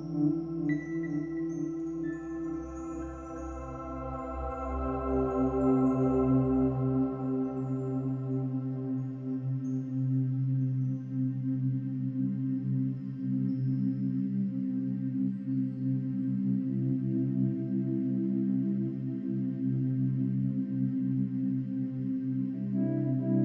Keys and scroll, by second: 1.7 space, 2.0 space.